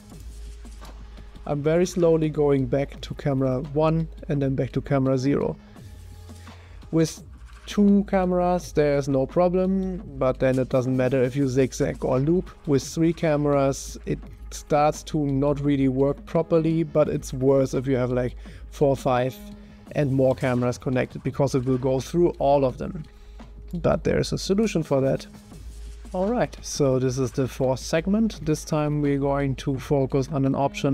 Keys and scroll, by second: 0.9 0, 6.2 0, 7.6 0, 14.0 0, 15.4 0.